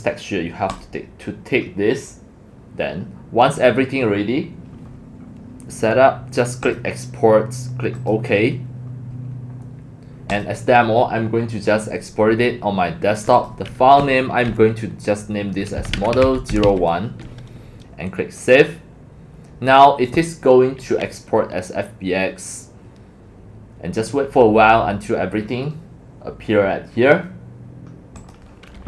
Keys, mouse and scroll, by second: 0.7 click, 0.8 click, 6.6-9.2 drag, 10.3 click, 13.3 click, 15.5-17.1 typing, 17.7 click, 18.4 click, 18.5-19.9 drag, 23.6 click, 28.3 click.